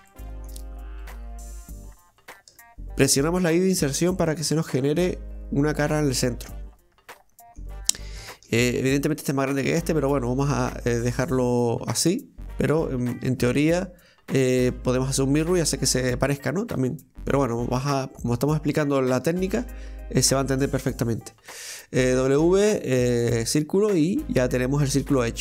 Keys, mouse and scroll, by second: 0.1 middle click, 1.0 shift+right click, 1.4 shift+right click, 1.8 shift+right click, 2.2 shift+right click, 2.6-4.5 middle drag, 4.5 i, 6.1-7.8 middle drag, 7.8 scroll down 1, 8.2-13.9 shift+middle drag, 16.8 scroll down 2, 17.0-19.0 middle drag, 19.0 scroll up 1, 19.3 shift+middle click, 19.6-21.6 shift+scroll up 1, 21.6 w, 24.1-25.4 middle drag.